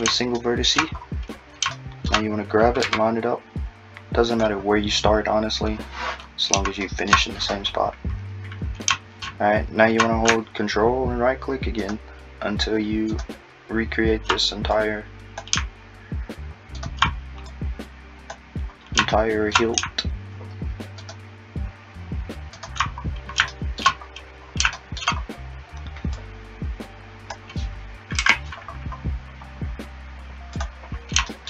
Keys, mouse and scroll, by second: 0.2 shift+scroll up 1, 0.4 shift+middle click, 1.0-1.8 scroll up 6, 1.8 shift+middle click, 2.8 g, 11.9 ctrl+Right, 13.1 ctrl+Right, 14.8 Left, 16.9 ctrl+Right, 17.5 Left, 21.1-21.6 ctrl+Right, 22.6 ctrl+right click, 23.0-23.5 scroll up 4, 23.5 shift+middle click, 24.1-24.8 scroll up 6, 24.8 shift+middle click, 25.2-26.2 scroll up 3, 26.2 click, 28.2 f, 28.6-30.6 scroll down 8, 30.6 click, 31.3 shift+middle click.